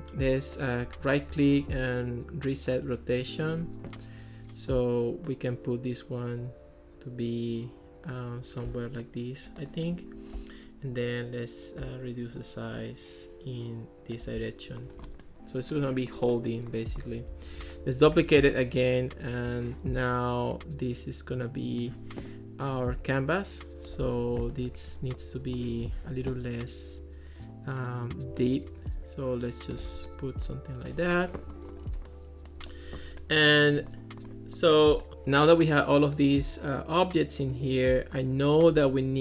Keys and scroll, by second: 18.1 super+d.